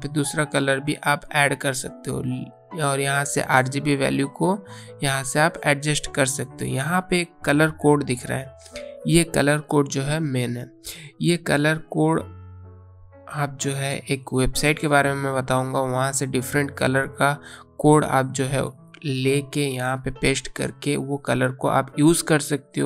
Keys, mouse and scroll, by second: 3.0 click, 11.0 click, 20.9 click.